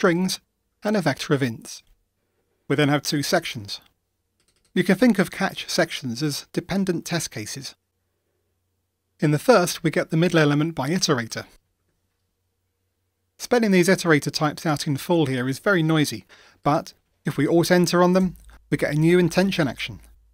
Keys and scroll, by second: 18.3 alt+Return.